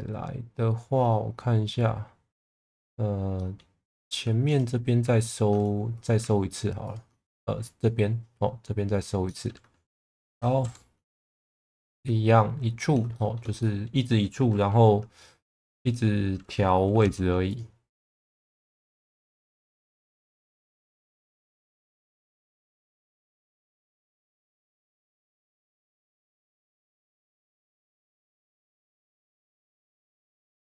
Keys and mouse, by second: 3.3 middle click, 3.9 2, 5.9 click, 9.2 middle click, 10.3 e, 10.6 x, 11.4 click, 11.8 middle click, 13.2 shift+middle click, 13.6 middle click, 15.8 1, 16.9 g, 17.0 b, 18.1 click, 18.6 middle click, 19.3 shift+middle click, 20.1 click, 21.7 g, 23.3 middle click, 23.7 2, 24.3 middle click, 25.5 click, 26.5 click, 27.6 click, 28.3 click, 30.3 middle click.